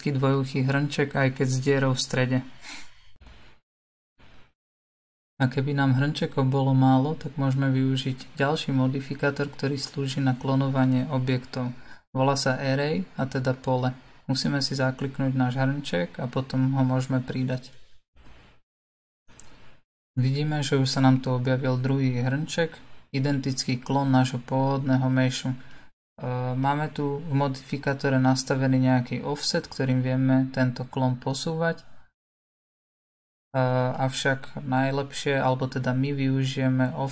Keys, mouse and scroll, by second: 2.2 click, 3.2-10.1 middle drag, 10.1-12.1 drag, 14.3-19.6 drag, 21.0-22.0 scroll down 2, 22.0-22.6 scroll down 2, 22.6-30.5 shift+middle drag, 30.5-33.6 drag.